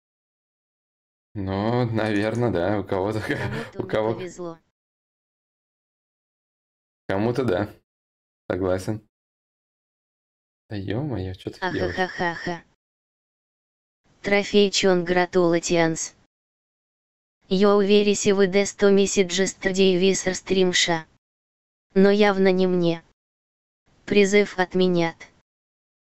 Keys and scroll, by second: 23.5 b.